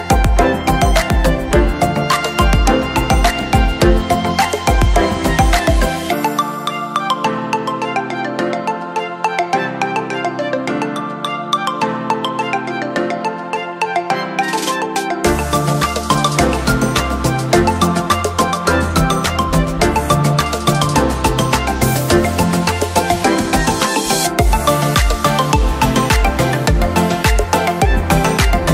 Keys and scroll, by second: 20.2 ctrl+shift+j, 22.5 ctrl+q, 26.7 ctrl+?.